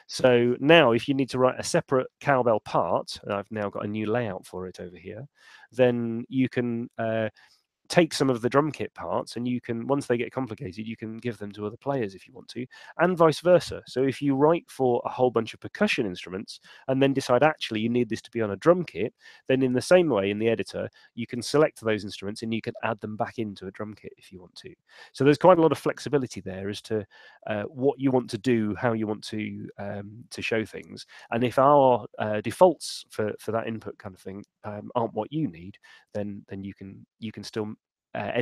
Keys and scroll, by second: 25.2 super+2.